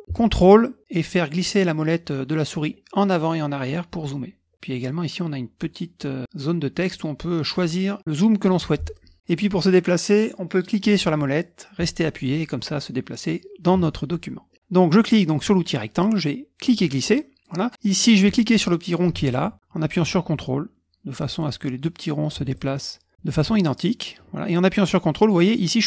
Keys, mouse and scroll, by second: 0.6-1.0 ctrl+scroll up 2, 1.0-1.9 ctrl+scroll down 2, 1.9-2.6 ctrl+scroll up 2, 2.6-3.2 ctrl+scroll down 1, 3.2-3.6 ctrl+scroll up 2, 3.6-4.2 ctrl+scroll down 2, 4.2-4.5 ctrl+scroll up 1, 8.0 click, 8.4 click, 8.9 middle click, 10.9-14.5 middle drag, 16.6-17.7 drag, 19.3-21.6 drag, 22.5-25.8 ctrl+drag.